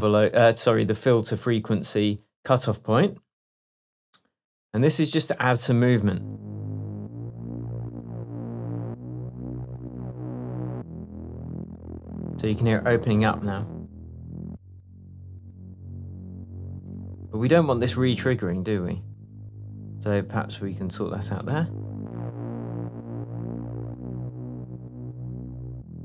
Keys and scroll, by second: 6.1 space.